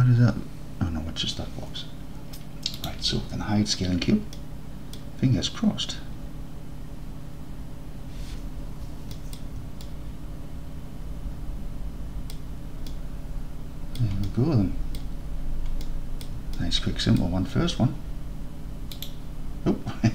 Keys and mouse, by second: 2.9-5.0 drag, 9.2 drag, 9.9-12.4 alt+drag, 12.9-14.0 drag, 14.3 alt+click, 14.7 alt+click, 15.9-16.3 drag, 16.6 alt+click, 19.0 click.